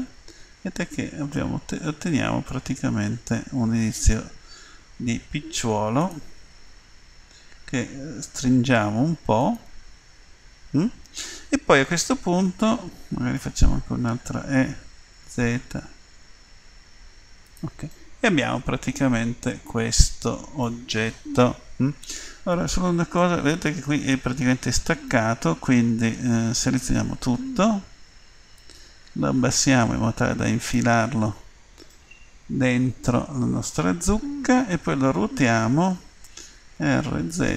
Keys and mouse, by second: 6.7 s, 13.4 e, 18.0 click, 18.2 middle click, 19.0 middle click, 23.3-24.7 middle drag, 26.9 a, 27.2 a, 28.5-30.6 drag, 31.4-33.8 middle drag, 36.7 r.